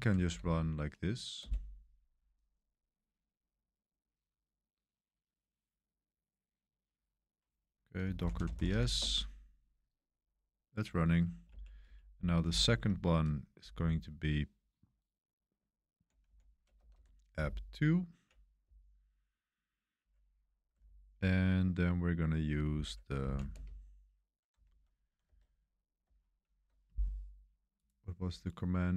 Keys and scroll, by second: 0.2 BackSpace, 1.4 Return, 7.7-9.2 typing, 11.4 Up, 11.8 Up, 12.4 Left, 12.9 Left, 13.0 Left, 13.1 Left, 13.2 Left, 13.3 Left, 13.3 Left, 13.4 Left, 13.5 Left, 13.8-16.9 typing, 17.4-18.1 Right, 18.6 Right, 19.1 Right, 19.2-19.9 typing, 20.8-21.5 Left, 21.6-21.9 Left, 22.0 Left, 22.1 Left, 22.2 Left, 22.3 Left, 22.4 Left, 22.5 Left, 22.6 Left, 23.2 Right, 23.5 space, 24.6 super+1, 25.2 super+3, 26.0 super+1, 26.3 super+1, 26.3 super+3.